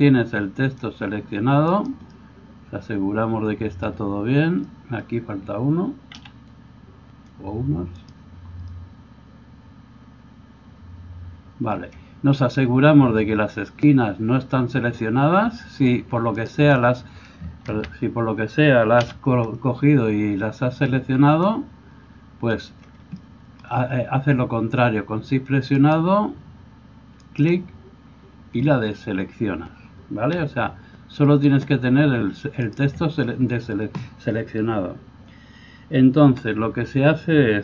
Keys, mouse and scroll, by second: 6.1 c, 16.4-27.5 shift+right drag, 17.7 ctrl+z, 19.0 c, 27.2-28.5 shift+drag, 28.5 shift+right click, 29.0-37.6 drag, 30.4 g.